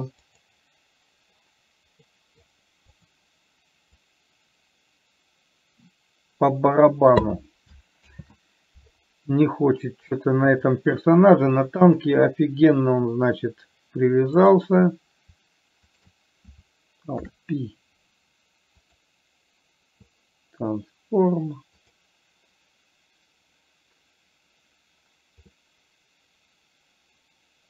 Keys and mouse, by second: 2.5 middle click, 3.4 click, 4.2-7.5 drag, 8.5 ctrl+z, 11.1 click, 17.6 ctrl+p, 25.9-27.6 middle drag.